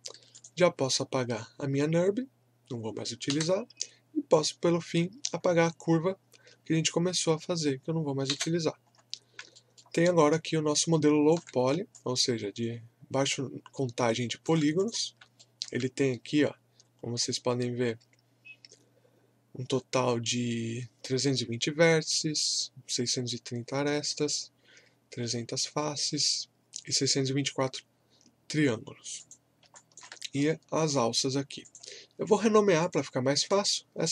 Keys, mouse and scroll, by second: 0.3 click, 3.3 Delete, 4.3 click, 5.2-5.6 scroll up 1, 6.2-6.6 scroll down 1, 8.3 Delete, 8.9-9.3 scroll down 1, 9.5 alt+middle click, 10.0-11.6 alt+drag, 11.6 scroll up 1, 11.9-14.8 alt+drag, 15.4 alt+middle click, 29.2 click.